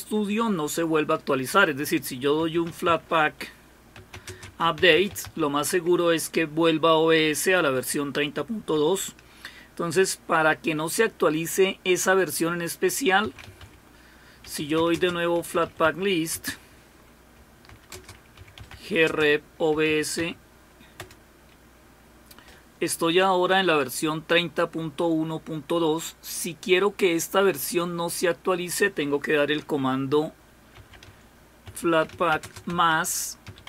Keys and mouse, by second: 3.2-5.7 typing, 8.6 BackSpace, 8.7-10.1 BackSpace, 14.3-16.3 typing, 17.7-19.7 typing, 21.0 typing, 31.9-33.6 typing.